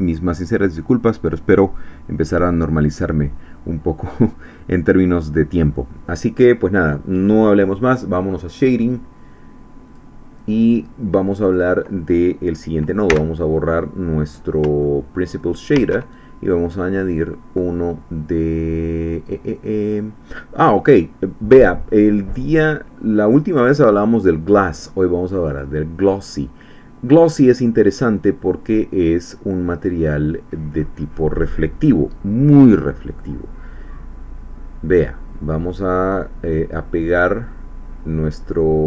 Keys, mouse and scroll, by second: 9.8 click, 11.4 click, 13.1 x, 14.2-14.6 scroll up 2, 14.8 shift+middle click, 15.4-15.7 shift+scroll up 2, 15.7 shift+a, 25.5 click, 27.9 click, 34.9-38.5 drag.